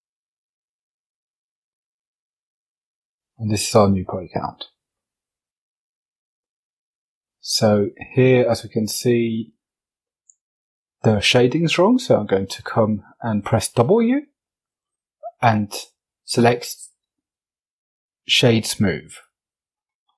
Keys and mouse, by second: 1.9 Tab, 3.5 shift+middle click, 3.9 middle click, 4.8 Tab, 6.2-7.0 drag, 7.4 shift+click, 7.8 click, 9.0 click, 10.9 w, 19.6 F22.